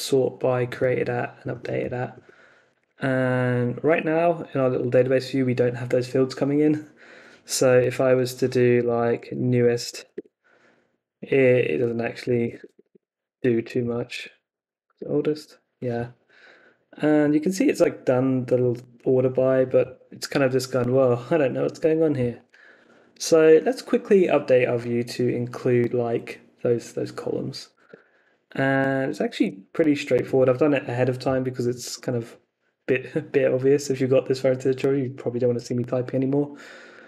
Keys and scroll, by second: 2.9 super+Tab, 7.7 Up, 8.6-10.5 typing, 11.8 Up, 12.2 BackSpace, 13.4-14.8 typing, 15.0 Return, 27.9 super+Tab.